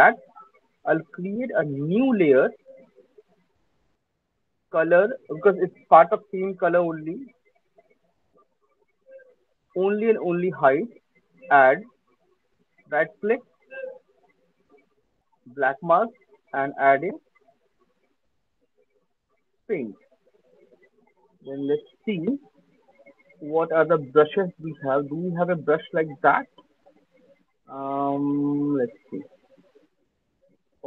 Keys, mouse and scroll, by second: 1.6 click, 4.8 click, 7.6 click, 8.7 click, 9.5 click, 11.7 click, 12.8 click, 14.5 right click, 16.0 right click, 16.6 right click, 19.7 click, 23.1 click, 24.8-25.1 scroll, 25.1 scroll down 5, 27.5-28.0 scroll up 1, 28.0 scroll, 29.1 scroll, 29.3 middle click, 29.5 middle click, 29.7 middle click, 29.8-30.2 scroll.